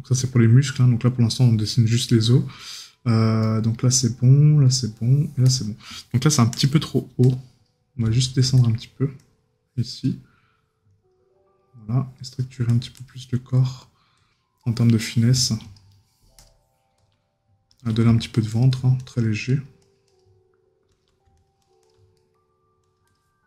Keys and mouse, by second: 1.9 right click, 3.4 right click, 14.6 right click, 22.2 right click.